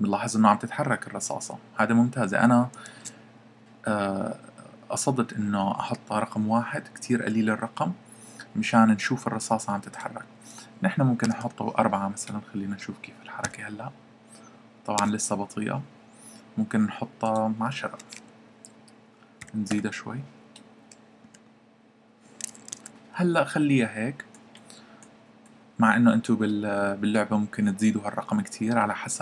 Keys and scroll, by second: 3.0 Escape, 11.2 4, 13.3 p, 15.0 Escape, 18.0 1, 19.1-19.8 typing, 21.2 p, 22.7 Escape.